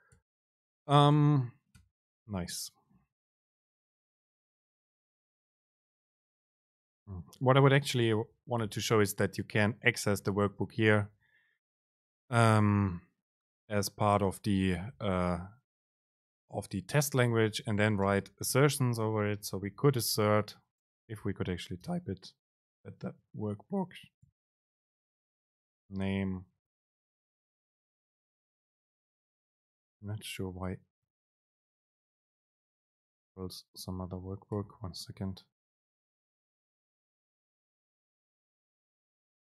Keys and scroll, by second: 0.2 BackSpace, 3.4 super+space, 8.4 End, 8.9 BackSpace, 10.7 super+space, 15.0 BackSpace, 17.6 Up, 17.9 End, 18.1 Return, 19.3 BackSpace, 20.3 BackSpace, 20.3 super+space, 22.3 Down, 23.0 Right, 23.5 shift+Left, 24.3 super+x, 24.5 Up, 25.8 Down, 26.1 super+Right, 26.6 super+v, 28.5 BackSpace, 30.3 Right, 30.8 Right, 34.6 super+c, 36.2 super+v, 39.3 Down.